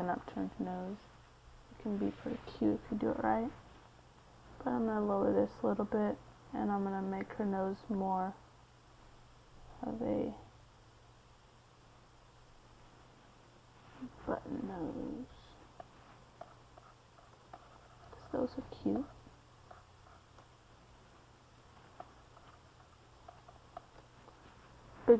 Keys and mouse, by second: 5.3 KP_3, 7.7 g, 8.3 f, 10.0-20.0 drag, 21.4 c, 22.0 f.